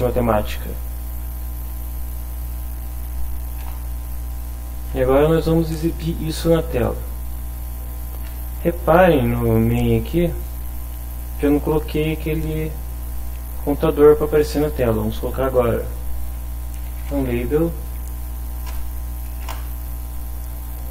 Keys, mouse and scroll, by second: 2.2 End, 3.6 Return, 9.6 click, 10.3 click, 14.8 click, 15.6 click, 16.8 l, 16.8 a, 17.1 b, 18.2 Down, 18.4 Up, 19.4 Return, 20.6 click.